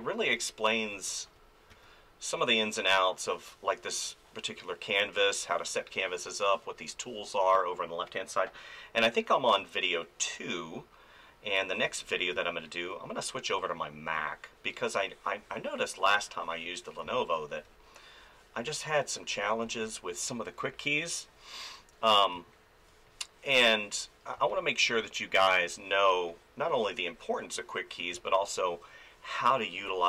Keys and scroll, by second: 1.7 f, 11.8 f, 12.3 space, 17.0 space, 19.6 space, 22.3 space, 24.4 space, 28.1 space.